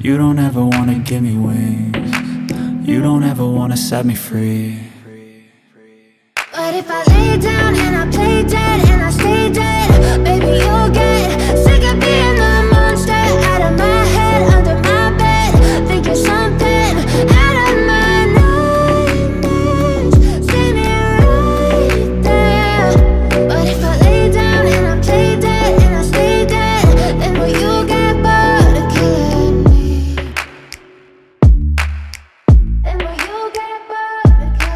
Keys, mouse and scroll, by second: 0.9-1.4 scroll down 1, 2.2-2.6 scroll down 1, 2.6 click, 3.4 click, 5.6 F4, 6.7 F9, 7.5 click, 8.7 ctrl+o, 9.1 scroll down 1, 14.6-15.1 scroll down 1, 15.7 click, 16.7 click, 17.1 scroll down 1, 17.4 click, 17.8 scroll down 1, 18.8 click, 19.0-19.4 scroll down 1, 20.4 click, 20.7-21.2 scroll down 1, 21.2 click, 22.9 click, 23.7 F4, 24.1 click, 24.9 F4, 25.4 click, 25.6-26.0 scroll down 1, 26.0 click, 26.6 scroll up 1, 26.9 right click, 28.3 click, 30.1 click, 31.6 click, 32.7 click, 33.7 click, 34.4 ctrl+v.